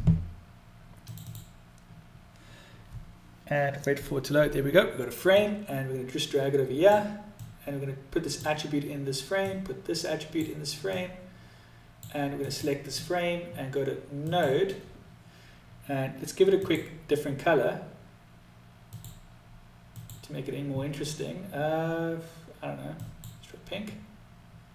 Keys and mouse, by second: 4.8-6.2 drag, 6.8 click, 8.8 click, 10.3-11.3 drag, 11.7 click, 13.4 click, 18.2 click.